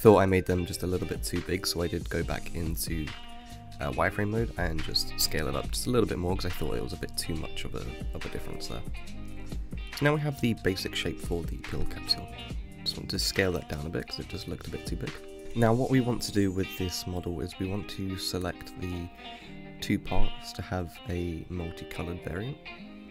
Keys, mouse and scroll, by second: 0.7-1.7 scroll up 2, 1.7-3.9 drag, 4.9 click, 6.4 scroll up 2, 7.1 s, 9.2 click, 9.9 scroll down 6, 10.1-13.2 middle drag, 13.2 s, 15.4 ctrl+l, 15.6-16.2 scroll down 4, 16.2 click, 16.8-17.4 scroll up 6, 17.4-18.4 scroll down 2, 18.4 ctrl+l, 19.1 ctrl+l, 20.7 ctrl+z, 21.8-22.6 scroll down 4, 22.6 click.